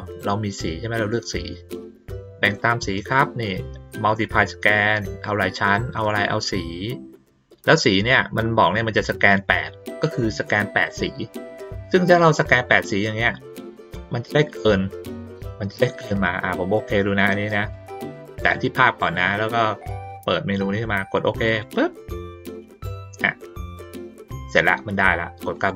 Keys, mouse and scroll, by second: 2.4 click, 13.7 ctrl+middle click, 17.7-18.1 drag, 21.4 click, 25.5 click.